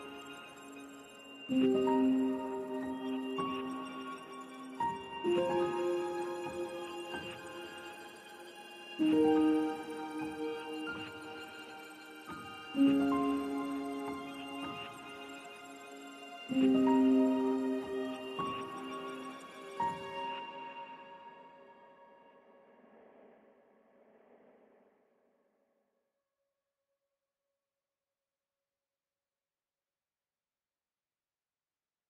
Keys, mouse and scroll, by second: 1.8-7.5 drag, 7.5 space, 7.9 click, 10.2 click, 15.8-19.5 drag, 19.5-29.7 drag, 30.2 click, 31.8 Tab.